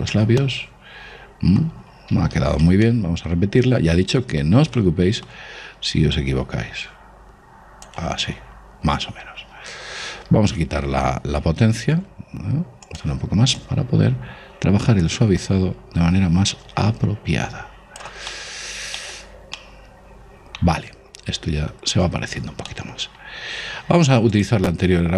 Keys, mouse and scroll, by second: 0.9-2.5 middle drag, 2.7 ctrl+z, 3.3-5.5 middle drag, 6.6 click, 12.3 shift+f, 13.5-15.9 drag, 18.8-22.0 middle drag, 22.0 scroll up 1, 22.1-24.8 middle drag, 24.8 click.